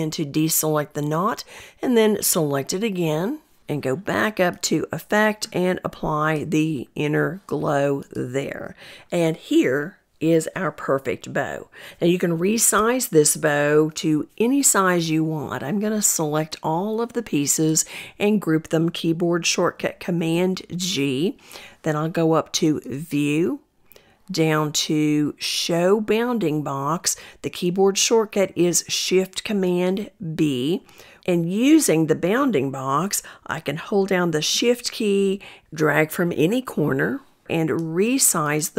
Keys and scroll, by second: 18.0 super+g, 27.2 ctrl+shift+super+b.